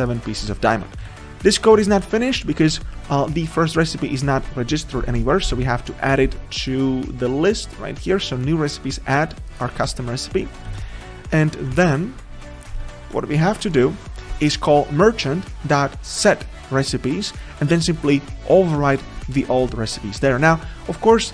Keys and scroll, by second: 0.8 ctrl+z, 1.4 ctrl+z, 9.8 ctrl+z, 11.7 ctrl+z.